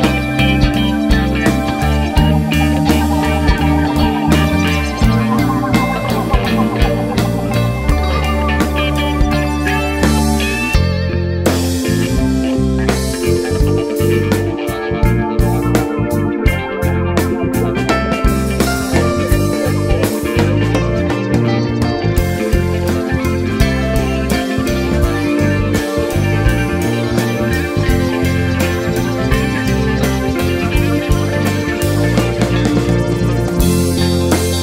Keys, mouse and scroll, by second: 2.9 click, 3.2 scroll up 1, 5.7 click, 6.6 click, 7.0-12.0 drag, 10.5-11.2 scroll down 2, 11.2 a, 14.2 click, 14.6 click, 14.8 h, 15.0 click, 15.4 click, 15.9 click, 16.1 h, 16.2 click, 16.6 click, 17.0 h, 22.0-24.5 drag, 32.8 click.